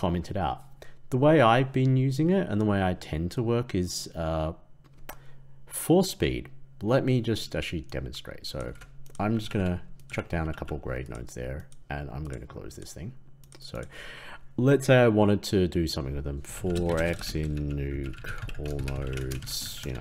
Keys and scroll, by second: 8.6 ctrl+x.